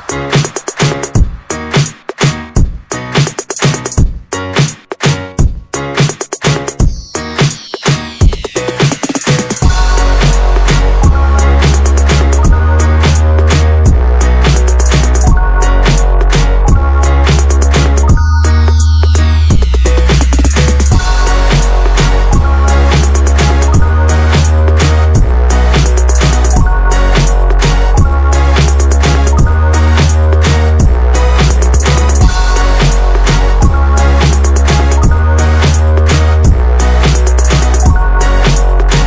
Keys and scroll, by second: 0.0 ctrl+a, 0.5-3.7 typing, 8.5-9.4 typing, 12.4 shift+Escape, 12.5 shift+Escape, 13.0 typing, 16.1-17.0 typing, 21.8-23.7 Escape, 23.9 ctrl+s, 25.2 Escape.